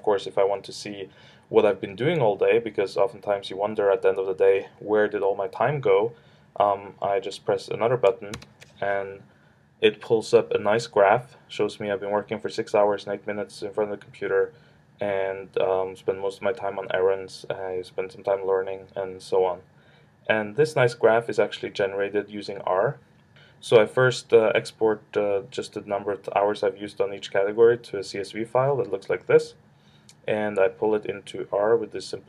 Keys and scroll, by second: 8.3 ctrl+alt+super+-.